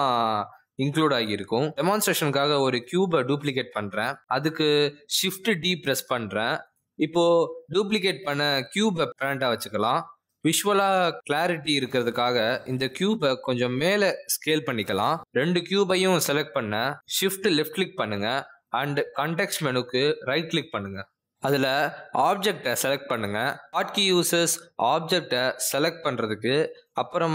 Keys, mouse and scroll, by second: 0.0-1.0 typing, 0.1 click, 0.3 shift+click, 0.8 shift+click, 4.0 click, 5.1 shift+d, 7.8 click, 17.7 shift+click, 21.1 right click.